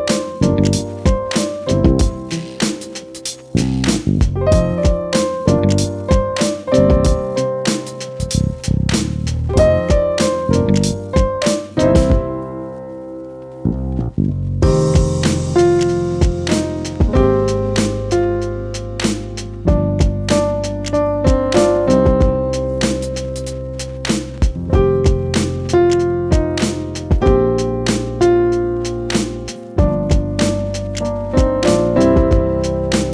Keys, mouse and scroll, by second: 0.2 ctrl+c, 5.5 ctrl+r, 8.3 click, 9.2 ctrl+c, 15.1 click, 18.0 ctrl+c, 25.7 ctrl+r, 30.3 click.